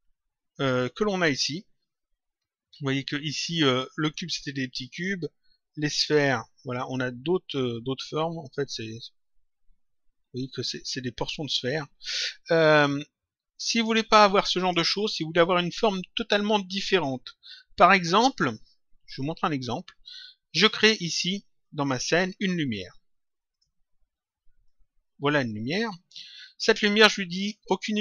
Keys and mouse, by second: 4.7 click, 13.7 click, 18.3 click, 20.5 click, 22.3 click, 23.4 click, 24.5 click, 27.8 click.